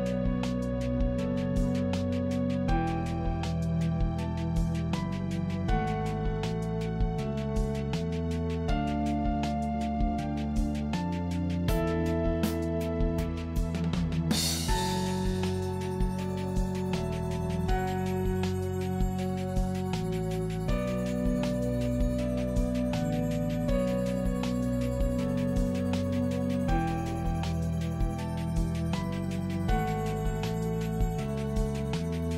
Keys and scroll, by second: 1.1 ctrl+j, 2.4 ctrl+t, 3.0 ctrl+t, 7.1 Return, 8.4 Return, 13.6 ctrl+shift+i, 15.5 ctrl+l, 19.8 ctrl+d, 22.4 ctrl+e, 26.9 ctrl+t.